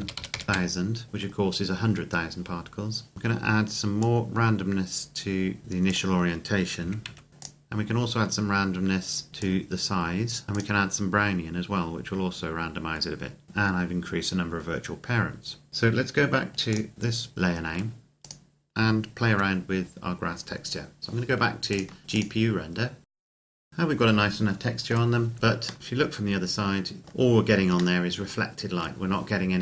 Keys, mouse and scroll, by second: 0.4 KP_Enter, 2.9 scroll down 1, 3.1 click, 6.6 KP_Decimal, 6.8 KP_1, 7.2 KP_5, 7.3 click, 13.4 click, 14.8-15.7 scroll down 1, 16.5 click, 16.9-17.3 scroll down 1, 17.3 middle click, 18.0 right click, 19.2 KP_Decimal, 20.1-21.5 scroll up 1, 21.5 scroll down 1, 21.7 click, 23.1 ctrl+s, 23.4 click, 23.8 middle click, 27.9 shift+middle click.